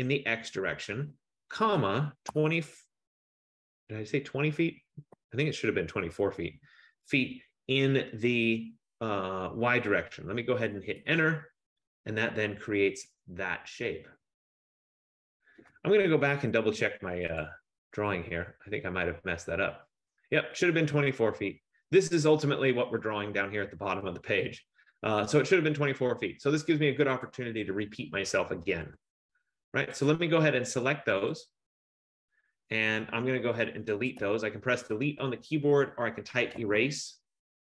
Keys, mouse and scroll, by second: 0.0-0.2 typing, 1.5-2.3 typing, 5.2 0, 7.2 ', 11.1 Return, 18.1 click, 18.8-22.6 scroll, 27.5 click, 28.9 Return, 30.2 click, 31.3 click, 34.3 BackSpace, 36.5-37.7 typing.